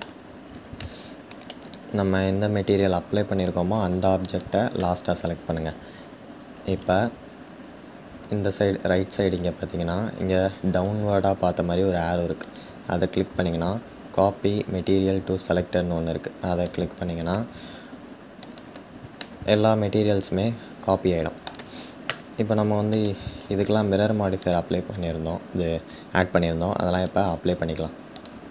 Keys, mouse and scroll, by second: 0.6-4.0 shift+middle drag, 4.0 shift+click, 16.4 click, 18.9-22.7 middle drag, 22.7 click, 27.9-28.5 drag.